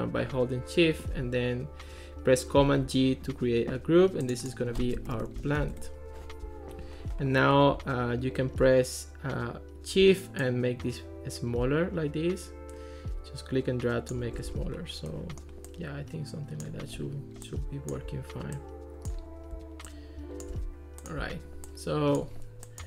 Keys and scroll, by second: 2.7 super+g, 4.9-6.1 typing.